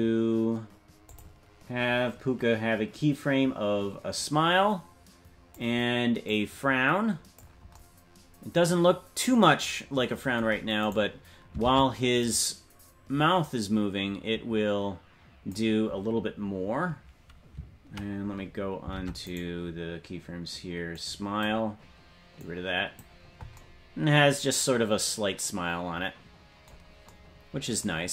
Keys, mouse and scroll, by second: 1.1-8.0 drag, 10.9 right click, 11.7 ctrl+Tab, 12.5 right click, 13.4-15.8 drag, 19.4 ctrl+Tab, 19.4 right click, 20.9-22.0 drag, 23.5 click.